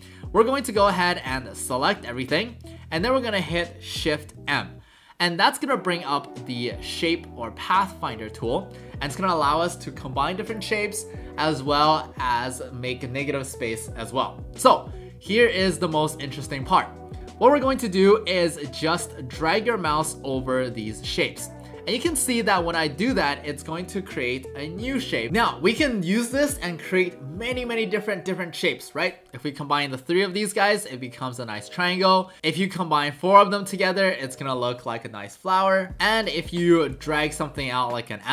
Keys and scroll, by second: 4.3 shift+m, 32.4 ctrl+z.